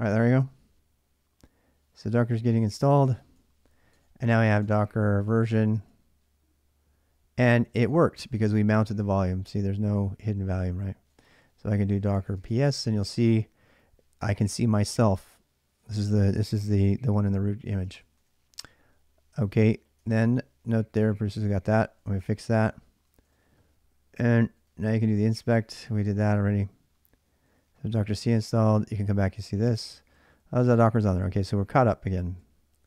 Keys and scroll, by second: 2.7-6.0 typing, 3.7 Return, 11.4-12.9 typing, 17.8 ctrl+a, 18.0 ctrl+a, 19.8 ctrl+[, 19.9-26.2 typing, 27.3-32.8 typing.